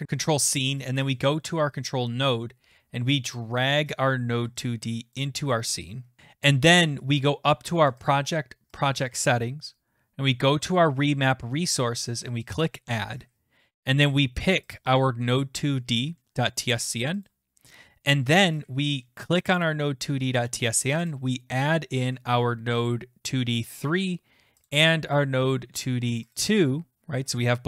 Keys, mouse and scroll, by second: 1.1 click, 5.1 click, 6.2 click, 8.1 click, 8.8 click, 12.5 click, 14.7 click, 17.1 click, 17.3 click, 19.7 click, 21.1 click, 23.7 click, 23.8 click, 24.7 click, 26.2 click, 26.3 click.